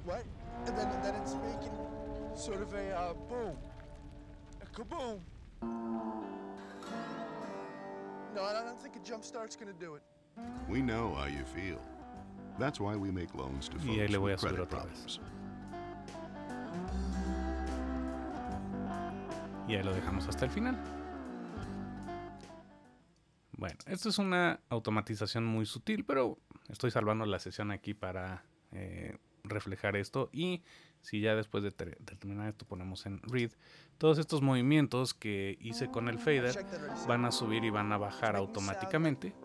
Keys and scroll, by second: 24.8 super+s.